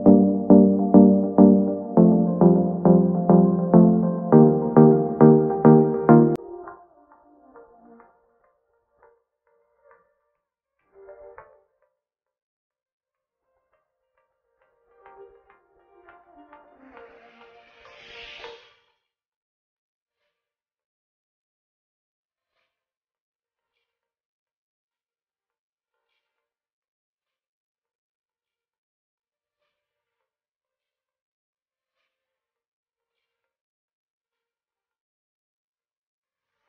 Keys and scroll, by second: 10.4 shift+Up, 15.2 shift+space, 16.6 shift+space, 24.6 shift+space, 25.8 ctrl+shift+], 32.0 shift+space.